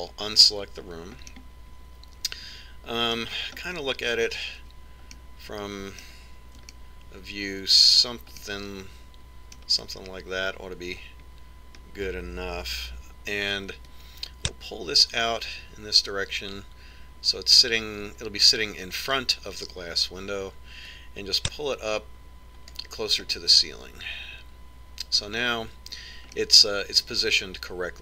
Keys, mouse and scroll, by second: 1.7-3.6 middle drag, 4.2-4.7 scroll up 1, 4.7-5.6 scroll up 1, 5.6-10.7 middle drag, 11.7-12.2 scroll up 1, 12.2-14.1 middle drag, 14.4 click, 21.5 click, 23.9-25.9 middle drag, 26.3-27.0 scroll down 1, 27.0-28.0 middle drag.